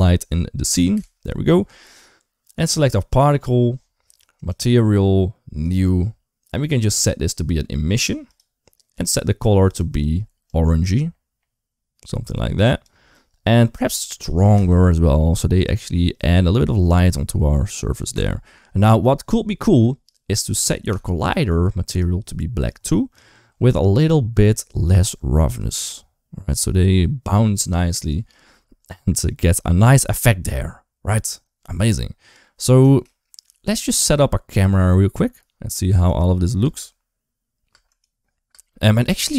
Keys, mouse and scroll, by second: 0.8 typing, 6.7-8.2 drag, 9.5 click, 13.7 click, 18.0 click, 20.8 click, 21.8 click, 24.7-28.1 drag, 31.6 middle click, 33.0 shift+middle click, 34.1 shift+middle click, 35.9 click, 36.4 space, 37.5-39.3 typing, 37.8 click.